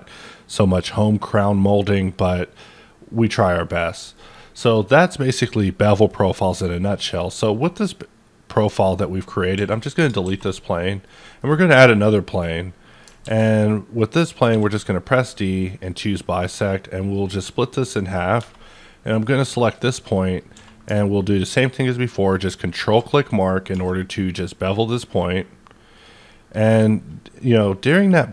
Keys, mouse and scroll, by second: 4.1 middle click, 4.2-9.8 middle drag, 9.5 x, 9.8 click, 10.2 shift+a, 11.0 click, 11.4-14.5 middle drag, 13.2 alt+x, 14.5 d, 15.6 click, 16.2-16.7 scroll down 1, 17.0 click, 17.5 middle click, 18.2 scroll up 1, 18.4 Tab, 19.1 click, 20.5 q, 22.8 ctrl+click, 23.7 2, 24.2-24.6 scroll up 6, 25.9 click.